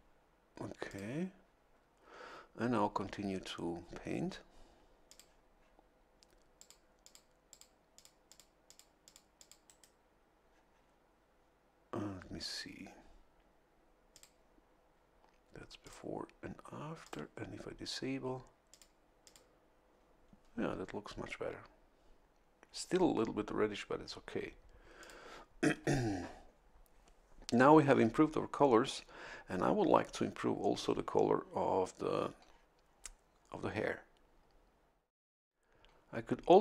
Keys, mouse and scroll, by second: 0.8 click, 5.0 click, 6.6 click, 7.0 click, 7.5 click, 7.9 click, 8.3 click, 8.6 click, 9.0 click, 9.4 click, 9.6 right click, 14.1 click, 15.8 click, 17.0 click, 18.7 click, 19.2 click, 25.0 click, 35.5 scroll down 2.